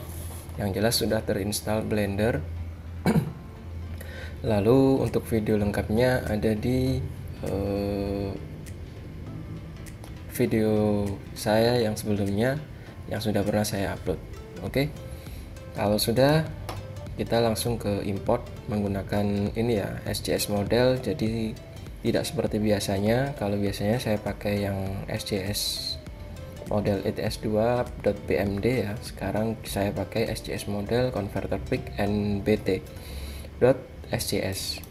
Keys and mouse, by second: 16.2-18.7 drag.